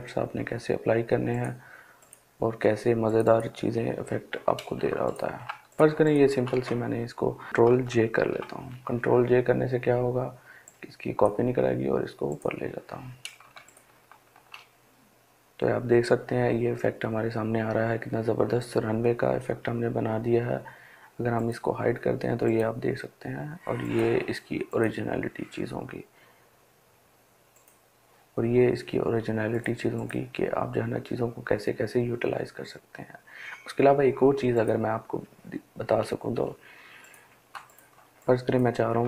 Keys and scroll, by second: 7.5 ctrl+j.